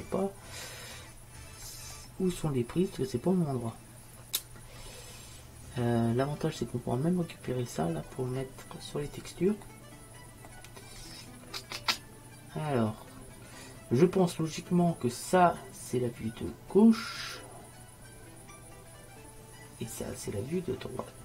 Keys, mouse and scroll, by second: 2.0-4.7 middle drag, 11.2 middle click, 12.2-17.6 middle drag.